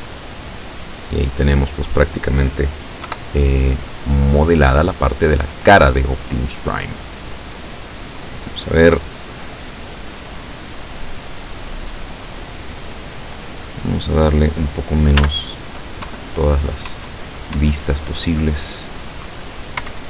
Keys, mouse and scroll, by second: 3.1 KP_7, 6.6-7.0 scroll down 2, 15.3 z, 16.1 KP_7, 17.0 KP_8, 17.6 KP_9, 19.9 KP_4.